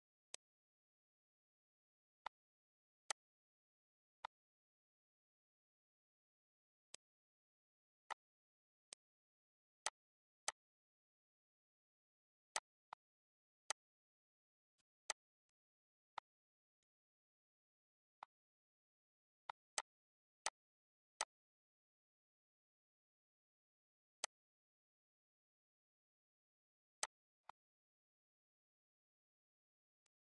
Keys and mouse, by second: 0.3 click, 2.3 click, 3.1 click, 4.2 click, 5.4 click, 6.9 click, 8.1 click, 8.9 click, 9.8 click, 10.4 click, 12.1 click, 12.6 click, 13.7 click, 14.8 click, 15.4 click, 16.1 click, 16.8 click, 17.2 click, 18.2 click, 19.1 click, 19.5 click, 20.5 click, 21.2 click, 21.7 click, 22.6 click, 23.7 click, 24.2 click, 24.7 click, 25.8 click, 26.6 click, 27.5 click, 28.6 click, 29.2 click, 30.0 click.